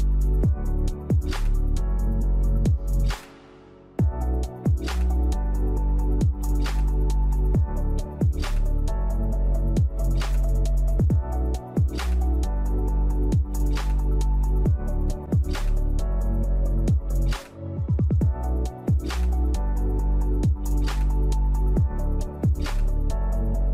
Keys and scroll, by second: 9.9 2, 11.6 3, 11.7 Return, 12.0 BackSpace, 13.4 4, 19.1 typing, 19.3 Return, 22.8 typing, 23.4 Return.